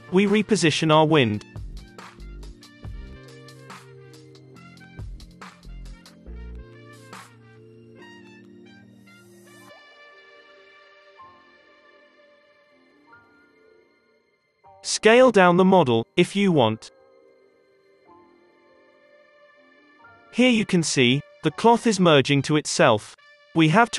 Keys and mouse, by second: 0.0 Up, 0.4 Down, 0.8-3.1 typing, 5.0 r, 6.0 i, 6.8 r, 7.6 i, 8.3-10.0 drag, 8.7 space, 11.4 space, 11.6-13.2 drag, 12.9 s, 15.5 s, 16.5-18.6 middle drag, 16.8 space, 20.4 middle click, 20.4 space, 20.9 alt+a, 21.4 space, 22.2 space.